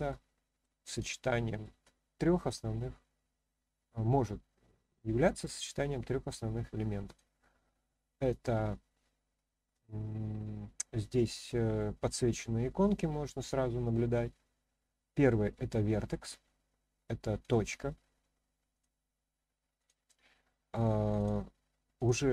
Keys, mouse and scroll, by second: 1.1-1.6 shift+middle drag, 7.0 click, 17.4 click, 18.7 click, 19.8 click, 21.1 click, 21.9 click.